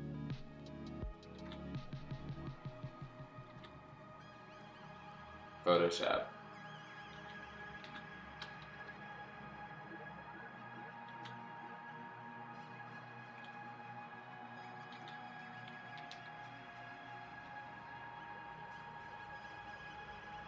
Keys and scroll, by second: 1.3 ctrl+z, 3.4 ctrl+z, 5.7 x, 7.1 x, 7.8 ctrl+z, 8.6 ], 8.8 ], 8.9 ], 11.1 ctrl+z, 13.4 ctrl+z, 14.9 ctrl+z, 15.8 ], 16.0 ].